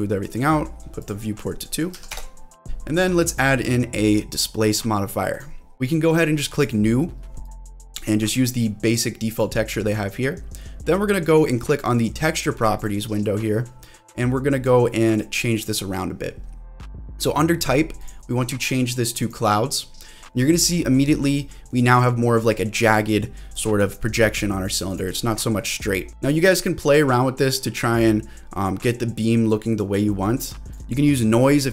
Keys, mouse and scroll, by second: 0.3 middle click, 1.0-2.6 drag, 3.3-5.4 drag, 6.6 click, 7.4 click, 12.8-15.8 drag, 18.0-19.3 drag, 20.0-20.4 scroll up 2, 20.4 middle click, 21.1 scroll down 2, 21.4 middle click, 21.9-22.5 scroll up 3, 22.5-23.0 scroll down 2, 23.2 click, 23.2 middle click, 23.5 click, 24.9 click, 25.6 scroll up 1, 26.1 middle click, 26.1-26.5 scroll down 1, 26.8-30.7 drag, 30.7 scroll down 2, 31.0 middle click, 31.4-31.7 scroll up 2.